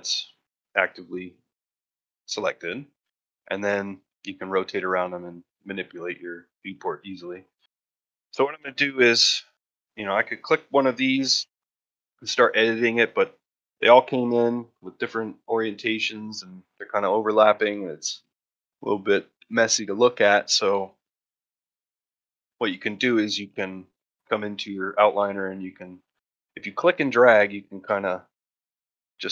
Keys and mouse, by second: 3.0 middle drag, 3.4 shift+middle drag, 3.7 ctrl+middle drag, 4.0 shift+middle drag, 4.4 middle drag, 4.8-5.3 shift+middle drag, 5.5 shift+middle click, 5.9 middle drag, 6.4 shift+middle drag, 6.7 middle click, 7.0-7.4 ctrl+shift+middle drag, 7.5 shift+middle drag, 8.6 middle drag, 9.1 shift+middle drag, 9.7 click, 10.2-11.1 middle drag, 11.3 shift+middle drag, 11.6 middle drag, 12.4 middle drag, 12.9 ctrl+middle drag, 13.2-13.6 middle drag, 13.9 shift+middle drag, 14.1-17.0 middle drag, 17.7 middle drag, 18.3-18.7 middle drag, 21.1 ctrl+middle drag, 21.4 shift+middle drag, 21.8 ctrl+middle click, 22.0 shift+middle drag, 25.3-26.3 drag, 26.8-28.0 drag, 28.2-29.3 drag.